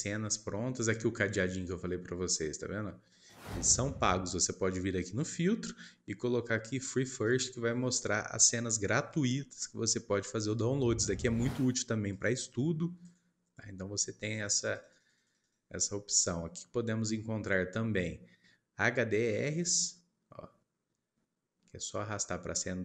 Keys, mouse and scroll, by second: 4.9-9.4 drag, 15.0 click, 19.5-20.9 drag.